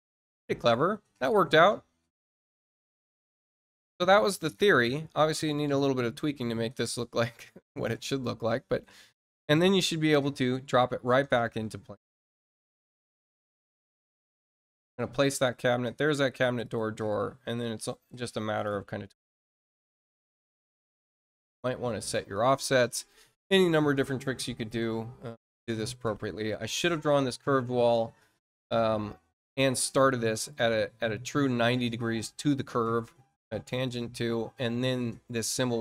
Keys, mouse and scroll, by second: 9.3 click, 10.7-11.0 scroll down 2, 12.7 click, 13.8 scroll up 2, 14.3 click, 15.4 scroll up 1, 15.9 scroll up 1, 16.6 click, 17.5-18.6 ctrl+drag, 20.2 ctrl+click, 27.4-28.1 scroll down 3, 28.3 middle click, 28.7 scroll down 2, 33.2-33.5 scroll up 2.